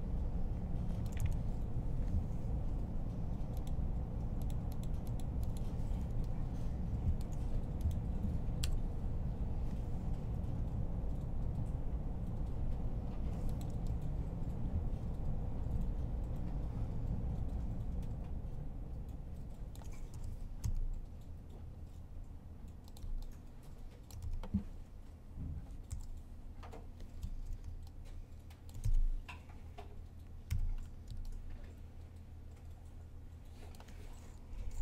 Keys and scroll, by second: 1.3 7, 8.4 7, 9.9-10.7 typing, 19.9 r, 22.5-24.0 typing, 25.7 typing, 30.3 typing.